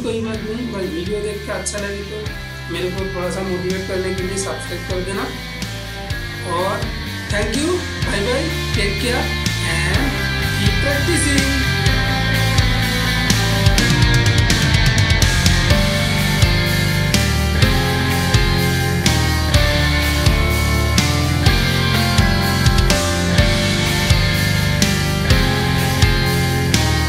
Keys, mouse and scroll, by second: 2.7-9.9 shift+middle drag, 9.9-12.0 ctrl+middle drag.